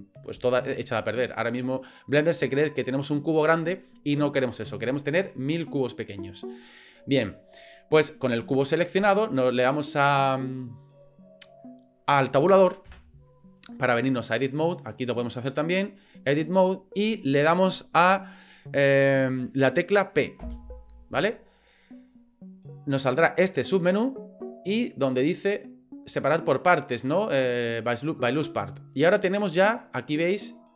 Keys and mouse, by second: 12.9 Tab, 20.4 p.